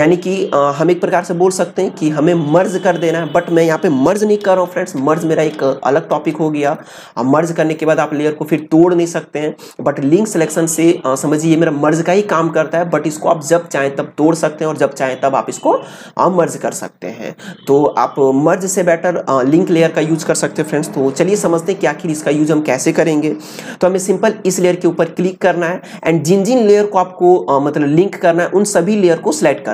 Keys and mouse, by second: 3.3 click, 4.3 ctrl+z, 24.4 click.